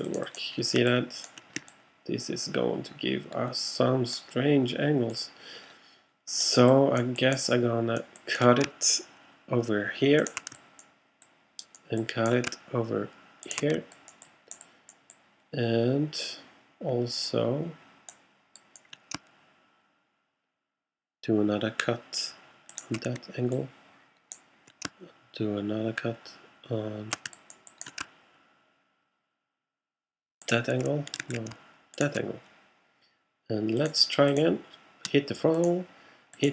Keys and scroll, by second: 31.3 shift+super+z.